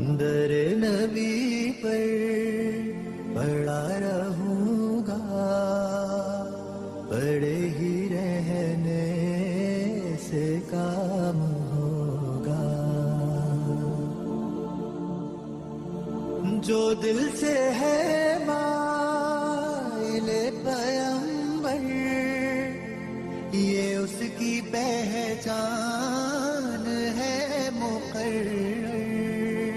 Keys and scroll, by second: 2.0 F2, 3.2 Escape, 4.4 c, 5.2 Escape, 6.0 shift+F2, 7.3 Escape, 9.0-9.9 typing, 10.4 F4, 16.1 F2, 22.2 Escape, 22.5 F4.